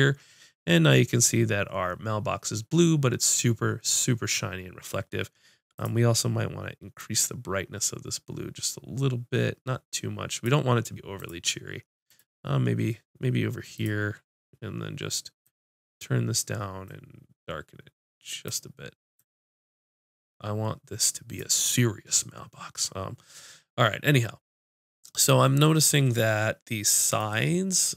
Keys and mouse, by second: 13.8-15.5 drag.